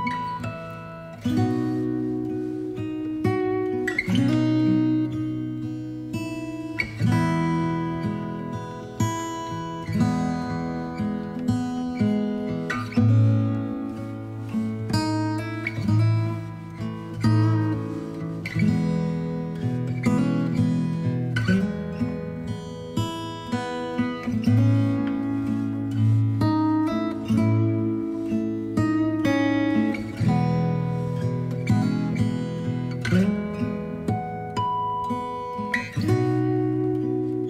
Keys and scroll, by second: 20.7 v, 25.3 Up, 27.0 ctrl+j, 31.5 space, 35.8 BackSpace.